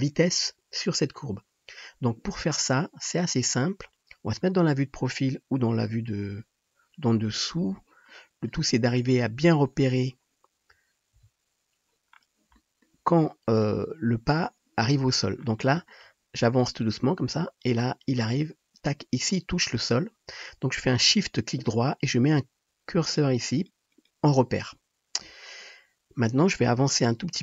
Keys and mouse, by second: 3.3-16.8 drag, 4.3 KP_1, 5.9 KP_7, 11.1 KP_3, 16.8-23.2 middle drag, 23.2 shift+click, 23.5 shift+middle click, 23.6 shift+click, 23.9 shift+middle click, 24.1-27.4 shift+drag.